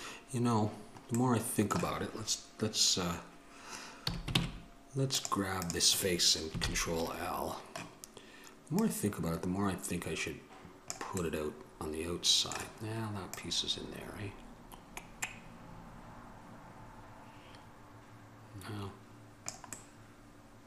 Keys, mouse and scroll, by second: 1.5-4.2 middle drag, 4.2 a, 4.5 ctrl+Tab, 5.8-6.8 right drag, 6.8 ctrl+l, 11.4-15.4 middle drag, 20.0 middle click.